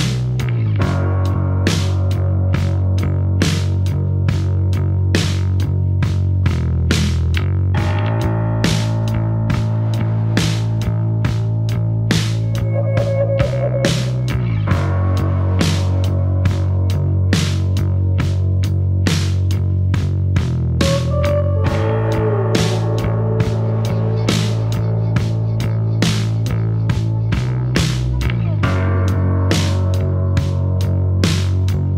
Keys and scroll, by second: 2.4 F2, 3.9 F1, 9.1 ctrl+f, 9.4 ctrl+d, 9.5 Escape, 10.6 9, 10.8 Return, 12.5 F1, 14.7 F3, 19.6 ctrl+d, 19.8 Escape, 22.3 ctrl+d, 22.4 Escape, 26.4 ctrl+d, 26.6 Escape.